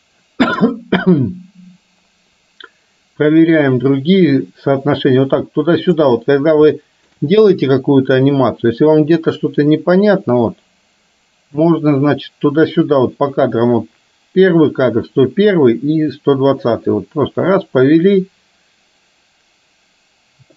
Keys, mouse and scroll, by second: 6.8 shift+middle click, 8.3-20.5 drag.